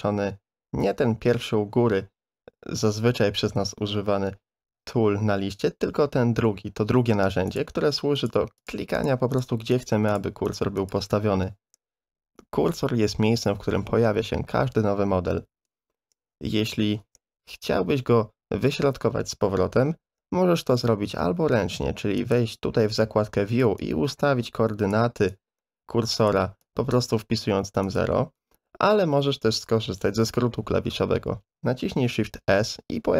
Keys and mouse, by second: 7.5 click, 8.2 click, 8.6 click, 9.0 click, 9.3 click, 9.7 click, 10.1 click, 10.5 click, 10.8 click, 20.8 n, 22.2 click, 23.8-24.9 drag, 25.4 click, 26.6 click, 27.8 click, 29.5 click, 29.9 n, 32.3 shift+s.